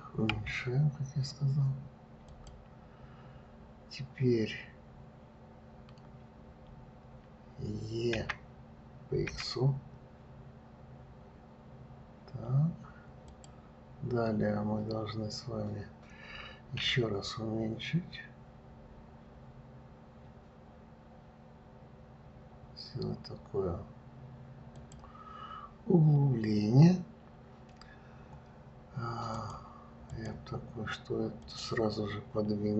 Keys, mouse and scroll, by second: 0.7 s, 8.5 e, 17.2 s, 29.7-31.9 drag.